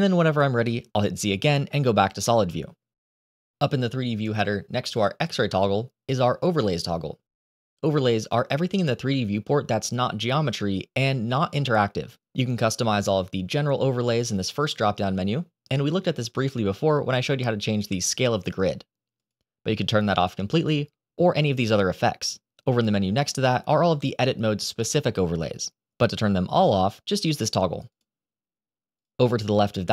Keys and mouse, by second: 8.0 click, 14.5-27.2 drag, 27.8 click, 28.8 click.